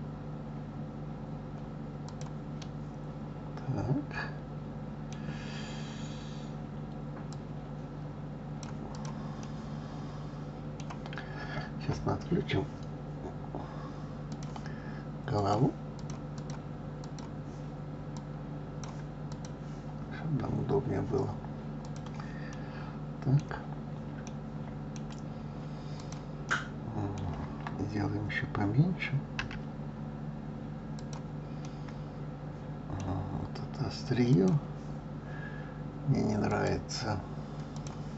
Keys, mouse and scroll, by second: 2.6-5.6 middle drag, 7.3 click, 8.9 click, 9.4-12.4 middle drag, 14.3 click, 15.3 click, 16.3 click, 17.0 click, 18.1-19.4 drag, 21.8 click, 22.5-23.5 middle drag, 23.5-24.0 scroll down 3, 24.2-25.3 middle drag, 25.3-26.0 scroll up 1, 26.0 click, 26.5-29.4 middle drag, 29.4 s, 31.7-33.2 middle drag, 33.2-34.3 scroll up 2, 34.3 click, 36.4-38.1 drag.